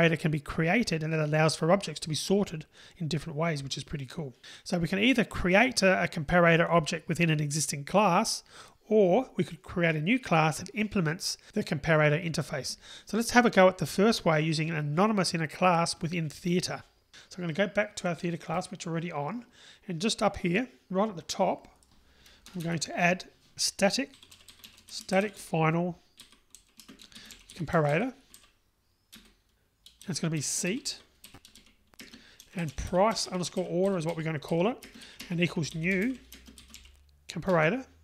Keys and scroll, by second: 29.2 Return, 37.8 Return.